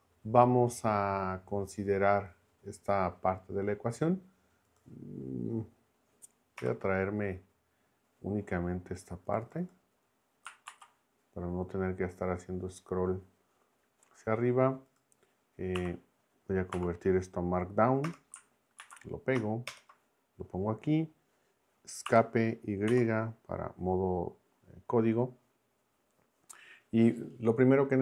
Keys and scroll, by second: 6.6 Return, 10.7 super+c, 15.8 Escape, 16.7 m, 18.0 Return, 18.8 super+v, 19.7 shift+Return, 22.1 Escape, 22.9 y.